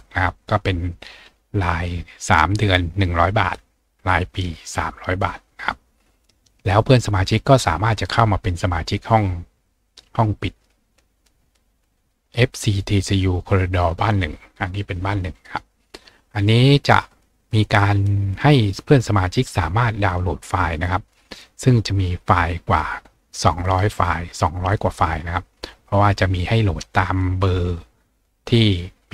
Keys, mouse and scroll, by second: 16.1-16.7 scroll down 2, 20.0 click, 23.3-26.6 scroll down 2, 26.6 scroll down 1, 28.5-29.1 scroll up 2.